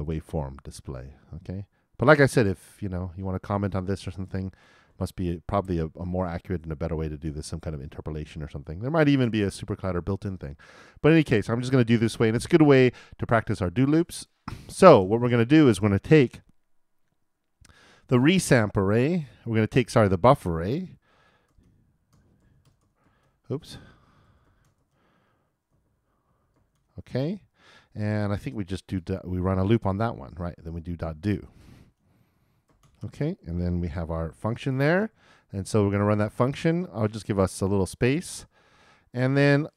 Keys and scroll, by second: 33.4 shift+o, 34.4 shift+[, 34.5 shift+], 35.1 shift+;.